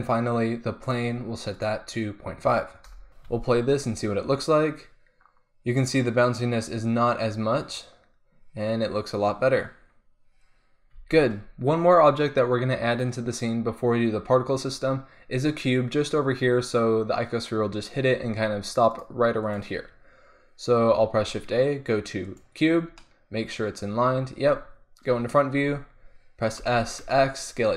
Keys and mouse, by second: 1.6-3.1 middle drag, 3.3 alt+a, 11.1 alt+a, 12.9-14.2 drag, 18.9-21.3 drag, 21.1 shift+a, 23.0-24.6 middle drag, 24.6 click, 25.0 KP_1, 26.6 s.